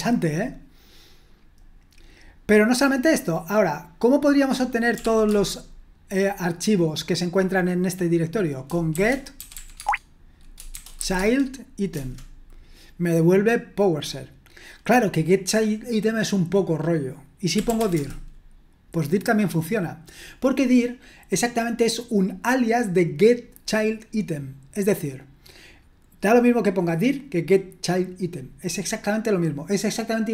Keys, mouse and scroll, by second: 0.5-2.6 scroll down 1, 2.6 click, 4.8-5.5 typing, 9.1-11.5 typing, 11.9 Return, 17.4-18.3 typing.